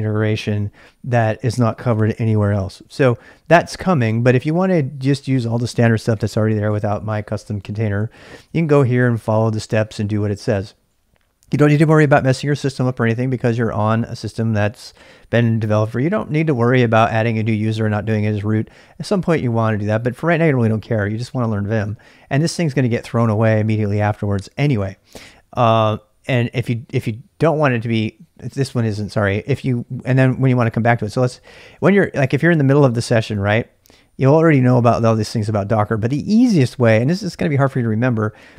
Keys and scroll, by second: 2.6-10.4 typing, 13.4-14.6 typing, 32.5-33.5 typing.